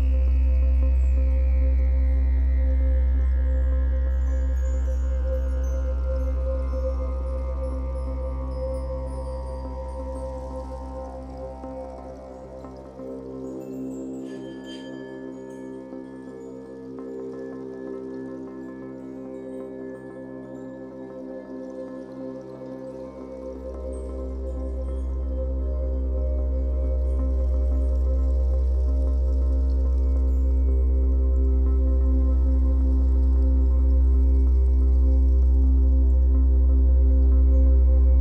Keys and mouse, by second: 0.3 typing, 1.6 typing, 2.2 click, 4.0 typing, 5.5 typing, 6.6 typing, 7.4 Return, 8.5 g, 10.8-11.5 typing, 11.5 click, 12.2 alt+shift+click, 13.5 ctrl+alt+click, 14.8 typing, 16.5-16.9 typing, 18.0 shift+click, 18.9-19.7 typing, 19.2-20.8 drag, 20.8 typing, 21.3-22.9 drag, 22.9-24.1 typing, 25.3 shift+click, 29.0 typing, 29.9 click, 31.2 typing, 32.9 typing, 33.6 click, 35.1 click, 36.9 typing, 37.8 click.